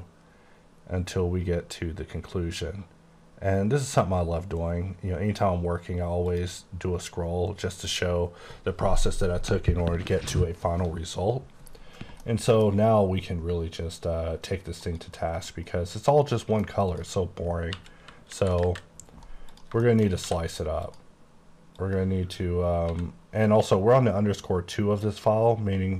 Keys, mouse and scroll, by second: 1.6-4.2 scroll up 11, 4.2-6.3 scroll up 8, 6.3 click, 7.8 click, 12.3 middle click, 14.8 click, 15.5 middle click, 17.0 click, 17.8 KP_4, 18.4 KP_7, 18.7 KP_5, 19.5 click, 19.8 shift+scroll up 1, 19.9 shift+middle click, 20.3 d, 20.9 click, 21.8 click, 22.9 x.